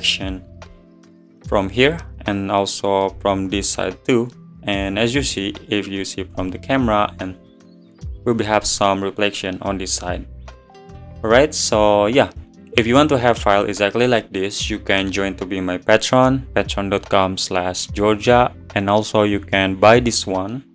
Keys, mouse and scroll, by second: 0.9 scroll down 3, 1.1-4.8 middle drag, 4.8 click, 6.4 scroll up 2, 14.6 click.